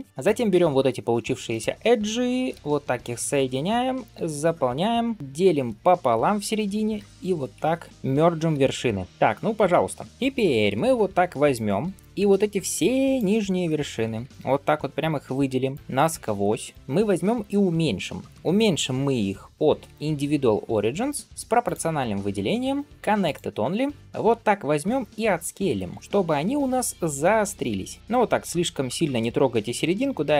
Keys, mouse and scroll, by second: 1.3 shift+click, 2.4 f, 3.2 click, 3.6 middle click, 4.0 f, 4.7 scroll up 2, 5.0 middle click, 5.4 ctrl+r, 6.8 1, 7.4 alt+z, 7.9 click, 8.4 m, 9.1-10.5 middle drag, 11.4-13.0 drag, 13.5 middle click, 14.1 shift+click, 15.3 shift+middle click, 15.7 shift+click, 16.9 shift+middle click, 19.7 ., 21.5 click, 22.9-23.6 drag.